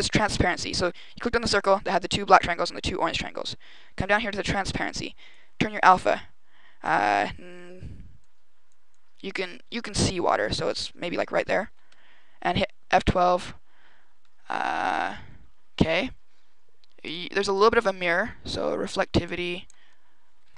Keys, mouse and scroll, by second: 5.2 click, 8.1 click, 8.8 click.